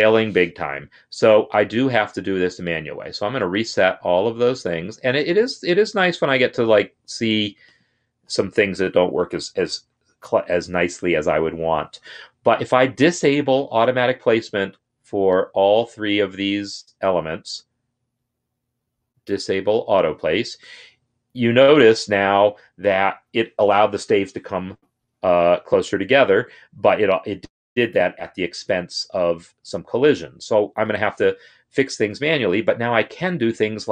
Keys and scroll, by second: 5.9 ctrl+r, 8.2 ctrl+r.